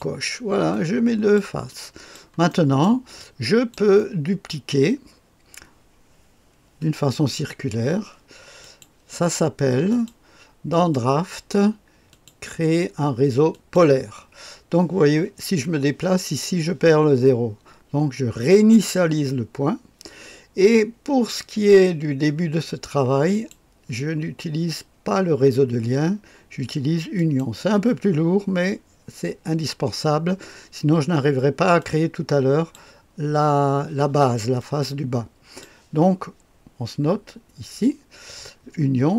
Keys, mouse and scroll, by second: 0.7 click, 1.7 click, 2.5 middle click, 3.2 click, 4.0 click, 8.6 click, 9.9 click, 10.7 click, 12.1 click, 13.5 click, 18.5 click, 23.3 click, 27.2 click, 31.8 click, 34.6-35.6 drag.